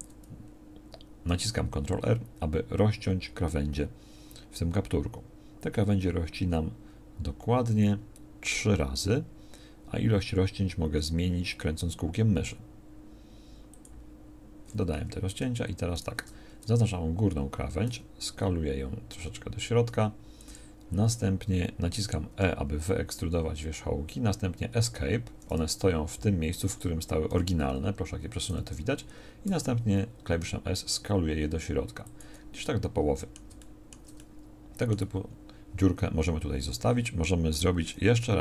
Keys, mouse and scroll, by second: 14.9 a, 17.8 s, 22.3 e, 27.3 g, 29.4 s, 32.7 middle click, 33.6-37.0 middle drag.